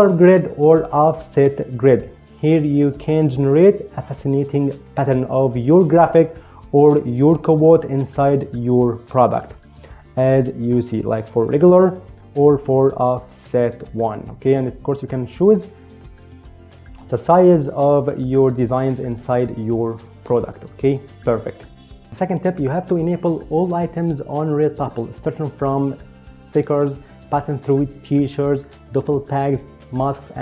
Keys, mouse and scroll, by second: 11.5 click, 12.6 click, 14.9 click.